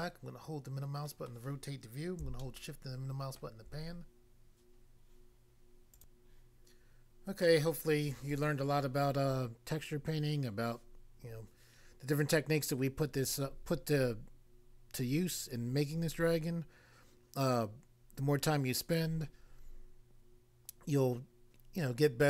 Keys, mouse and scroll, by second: 1.3 middle click, 2.4 shift+middle click, 5.9 click, 6.7 click.